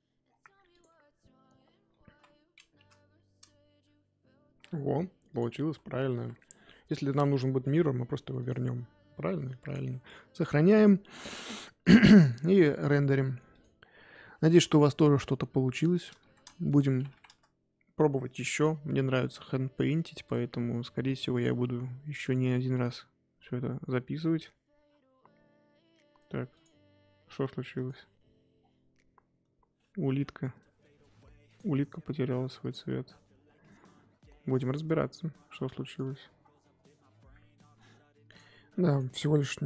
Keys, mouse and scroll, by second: 0.0-0.5 scroll down 2, 0.7 click, 0.9-2.0 middle drag, 2.0 z, 2.7 KP_0, 4.6 scroll down 2, 11.9 click, 15.4-17.3 drag, 17.3 KP_1, 18.6 click, 21.6-25.2 drag, 26.0 scroll up 2, 26.5 click, 27.7 click, 28.5-29.6 scroll down 4, 29.7-31.5 middle drag, 31.5 click, 32.6 click.